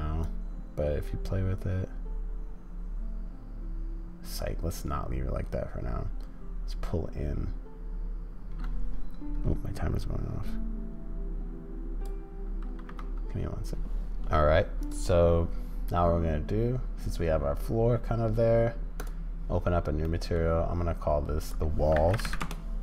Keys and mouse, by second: 0.3-0.7 drag, 0.7-2.5 middle drag, 20.1 middle click.